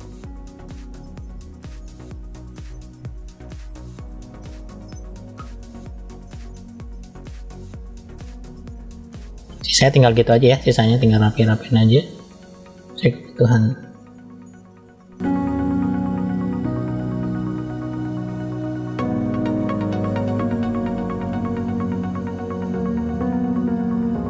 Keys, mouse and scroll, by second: 0.5 click, 0.8 middle click, 1.6 click, 2.0 click, 2.5 click, 2.8 click, 3.2 click, 3.4 click, 3.7 click, 4.2 click, 4.8 middle click, 5.5-6.9 drag, 7.3 click, 7.7 click, 8.5 middle click, 9.4 middle click, 10.1 middle click, 10.9 click, 11.3 click, 11.8 middle click, 12.6 scroll up 1, 13.3-13.7 scroll down 1, 13.8 middle click, 14.5 click, 14.9 click, 15.2 middle click, 15.3 scroll down 1, 15.4 scroll up 1, 15.4 middle click, 15.6 middle click, 15.8 middle click, 15.9 click, 16.3 middle click, 16.5 click, 16.7 middle click, 17.0 click, 17.8 scroll down 2, 17.8 middle click, 18.1 middle click, 18.2 scroll up 3, 18.2 shift+middle click, 18.8 click, 19.0 middle click, 19.4 middle click, 19.5 scroll down 1, 19.6 middle click, 19.9 click, 20.0 click, 20.3 middle click, 20.5 click, 21.0 middle click, 21.1 click, 21.2 middle click, 21.3 middle click, 21.4 scroll up 3, 21.5 middle click, 21.6 scroll down 2, 21.7 middle click, 21.9 middle click, 22.1 middle click, 22.2 click, 22.4 middle click, 22.4 scroll down 2, 22.8 middle click, 22.9 middle click, 23.1 click, 23.4 middle click, 23.7 middle click, 23.8 shift+middle click, 23.8 scroll up 2, 23.9 click.